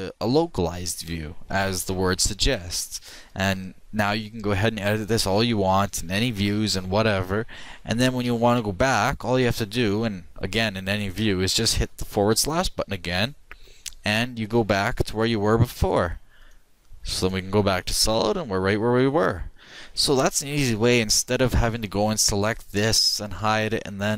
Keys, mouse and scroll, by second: 0.7-1.8 drag, 4.1-6.4 middle drag, 7.7 KP_7, 8.6-9.9 middle drag, 12.5 KP_Divide, 16.4-18.0 drag, 18.4-22.5 middle drag, 22.5-24.1 right drag, 23.4 h.